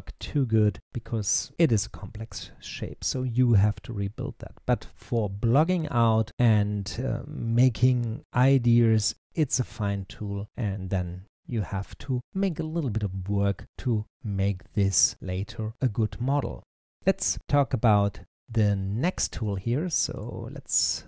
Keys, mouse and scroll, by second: 11.6 click, 15.2 click, 19.3 n.